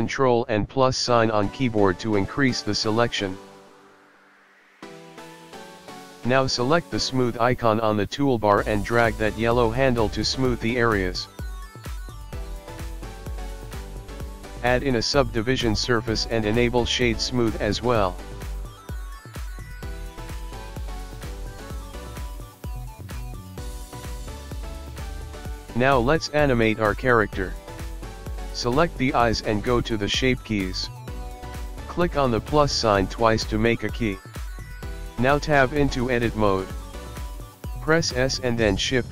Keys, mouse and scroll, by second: 0.2 click, 2.7 ctrl+KP_Add, 3.1 ctrl+KP_Add, 3.7 ctrl+KP_Add, 4.1 ctrl+KP_Add, 4.5 scroll down 4, 5.2 click, 5.7 click, 7.3 middle click, 8.2 click, 9.6 click, 10.3 middle click, 12.3 Tab, 13.7 click, 13.8 right click, 16.8 right click, 18.0 click, 19.0 middle click, 19.3 scroll down 5, 19.4 middle click, 20.5 click, 20.9 middle click, 25.2 click, 30.8 click, 32.2 click, 32.5 click, 33.9 Tab, 34.6-35.7 scroll up 9, 36.5 shift+middle click.